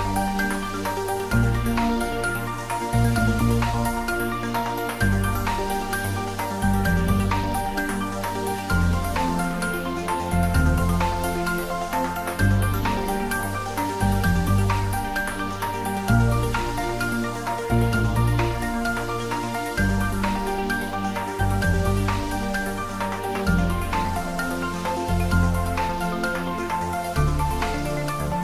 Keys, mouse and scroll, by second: 0.0 shift+click, 3.2 shift+click, 6.9 ctrl+z, 7.6 shift+click, 9.5 ctrl+z, 9.9 shift+click, 11.7 ctrl+z, 12.6 shift+click, 14.6 g, 18.3 g, 18.4 click, 20.7 shift+z, 21.6-24.4 middle drag, 24.4 click.